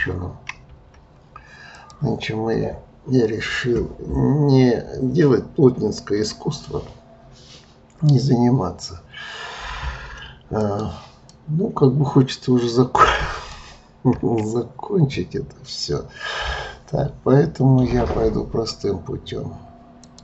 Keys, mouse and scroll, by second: 0.0 KP_3, 0.6 KP_1, 1.7 click, 10.6-14.1 middle drag, 14.1 KP_1, 20.0-20.2 drag.